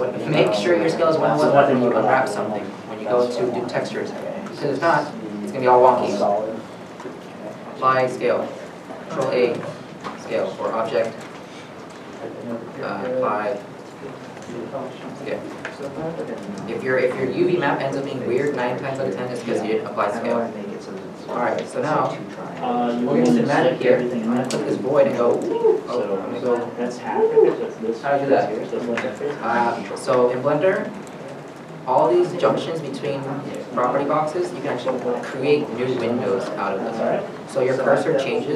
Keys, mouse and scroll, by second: 8.7 ctrl+a, 16.3 middle click.